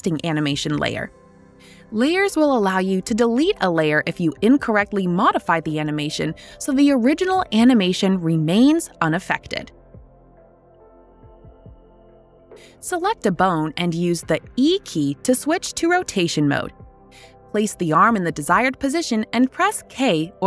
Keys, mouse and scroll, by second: 10.3 click, 11.1 click, 12.9-16.4 typing.